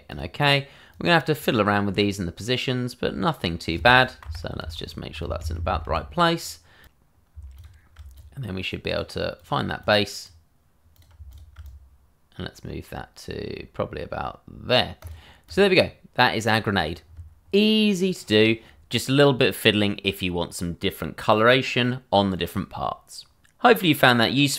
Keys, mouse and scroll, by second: 0.9 click, 4.2 Down, 5.4 Right, 6.8 click, 7.5 shift+click, 8.1 click, 9.9 double click, 9.9 click, 11.3 shift+click, 11.9 click, 15.5 double click.